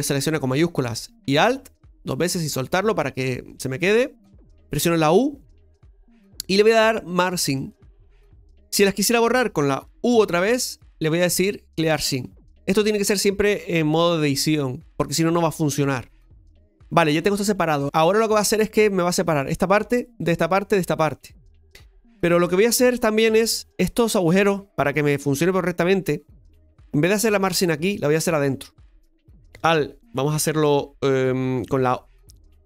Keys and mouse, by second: 1.4 alt+shift+right click, 7.7 u, 10.8 u, 15.6-18.8 middle drag, 22.3 KP_Divide, 23.4 middle click, 27.4 right click, 28.4 right click.